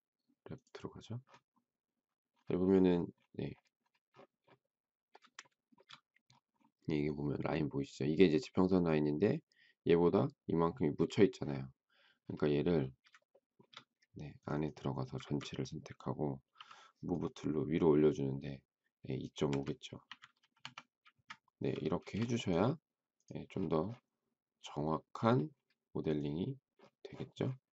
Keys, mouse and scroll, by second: 5.4 shift+middle click, 13.3 shift+middle click, 15.2 ctrl+a, 16.5 m, 19.3 2, 19.8 ., 20.3 5, 21.0 Return, 22.0 space.